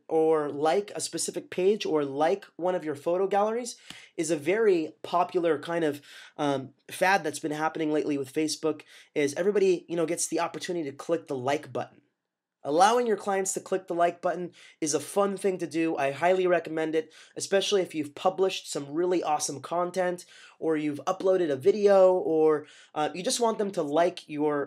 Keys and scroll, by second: 3.8 Right.